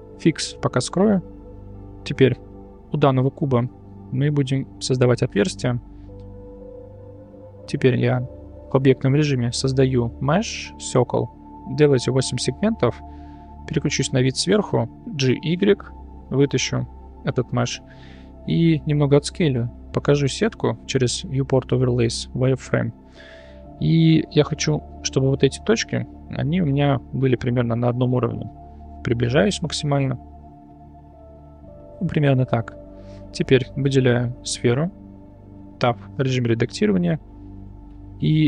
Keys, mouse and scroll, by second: 1.9 click, 4.1 Tab, 4.9 click, 5.8 Tab, 9.6 shift+a, 20.5-23.0 drag, 30.1 s, 33.9 click, 35.8 Tab.